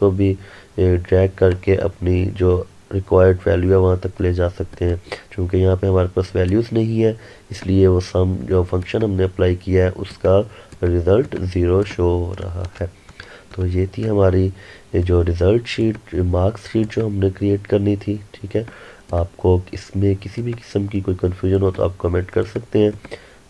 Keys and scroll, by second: 12.5 ctrl+Num_Lock.